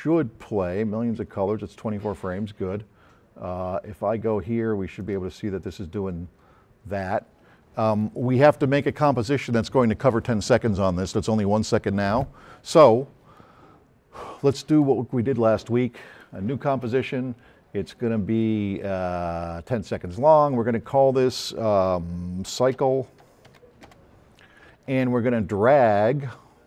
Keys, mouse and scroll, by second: 2.6 scroll down 1, 5.0-8.2 drag, 14.8 click, 16.0 click, 22.3-23.7 typing, 24.1 Return.